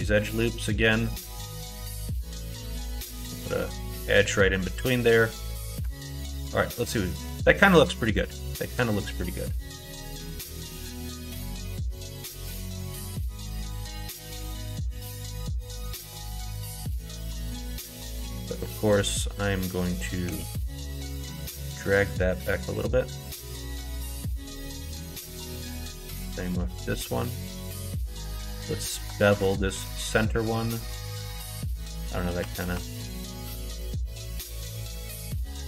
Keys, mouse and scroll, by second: 0.6 middle click, 1.2 middle click, 1.9 middle click, 2.7 ctrl+2, 2.9 ctrl+r, 3.8 middle click, 4.5 middle click, 5.1 middle click, 5.9 alt+z, 6.5-9.2 middle drag, 10.7 middle click, 11.7 shift+middle click, 12.2 middle click, 14.9 2, 16.2 middle click, 16.6 middle click, 18.0 middle click, 19.0 alt+click, 20.2 g, 24.5 alt+click, 24.7 middle click, 25.8 g, 27.8 middle click, 29.7 ctrl+b, 31.8 ctrl+z, 32.3 ctrl+z, 32.6 ctrl+z, 32.9 ctrl+z, 33.2 ctrl+z, 33.8 middle click.